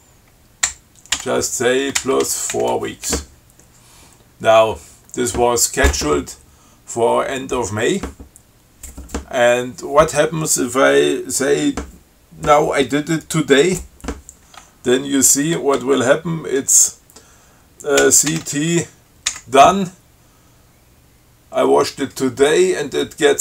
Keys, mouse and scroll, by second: 1.4 w, 2.2 BackSpace, 2.4 4, 2.8 w, 18.3 ctrl+c, 18.6 ctrl+t, 19.6 d.